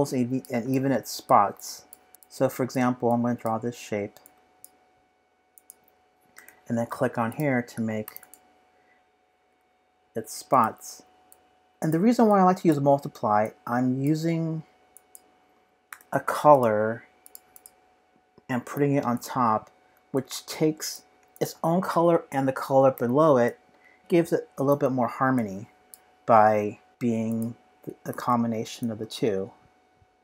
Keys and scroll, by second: 28.1 c.